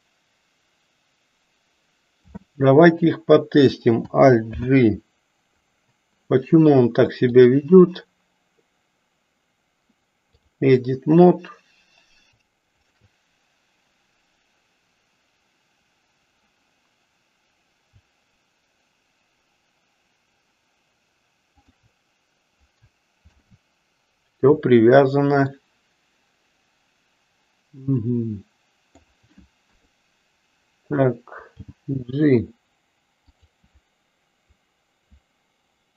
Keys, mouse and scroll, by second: 4.5 alt+g, 7.3-10.6 drag, 12.7 shift+click, 21.6 shift+click, 23.3 ctrl+p, 25.6-29.1 middle drag, 29.6 KP_3, 31.6 g.